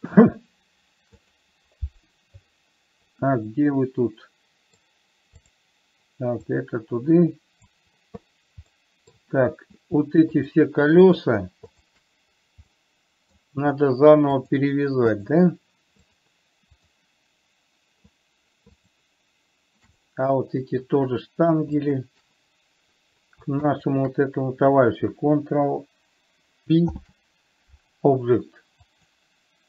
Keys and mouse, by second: 3.8-5.0 middle drag, 6.9-8.2 drag, 9.0 middle click, 10.7 shift+click, 11.4 shift+drag, 12.2 shift+click, 13.2-13.7 middle drag, 14.7 shift+click, 15.5 shift+click, 19.2 shift+click, 20.4-21.2 middle drag, 22.3 shift+click, 24.0 shift+click, 27.2 ctrl+p.